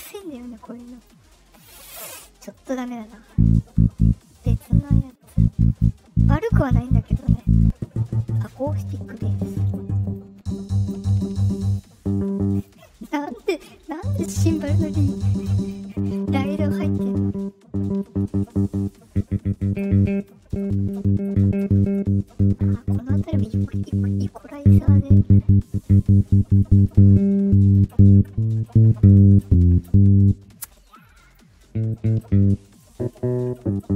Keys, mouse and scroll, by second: 0.9 click, 2.5 click, 4.2 click, 4.9 click, 5.6 click, 7.2 click, 10.0 click, 11.6 click, 12.5 click, 13.0 click, 15.5 click, 18.7 click, 20.1 click, 24.1-27.6 drag, 31.1 click, 32.6 click.